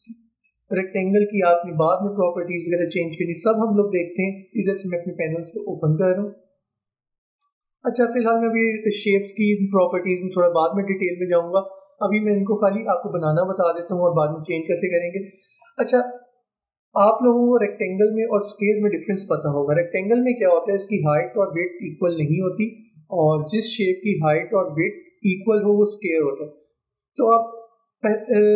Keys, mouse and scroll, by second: 5.7 click, 11.8 click.